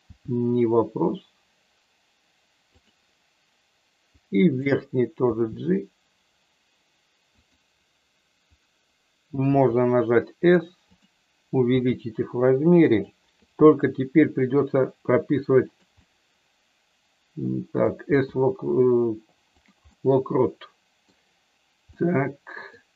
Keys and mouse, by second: 2.8 click, 4.2 click, 5.3 g, 7.3 click, 9.4 s, 10.8 click, 11.6 r, 12.8 click, 13.5 g, 15.7 click, 16.1-17.8 middle drag, 18.1 g, 19.5 click, 19.8-21.1 middle drag, 21.9 middle click.